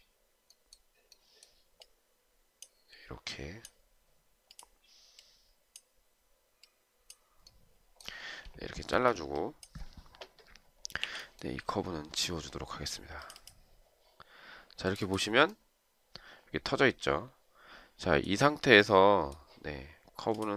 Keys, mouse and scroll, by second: 9.0 Escape, 11.1 Delete.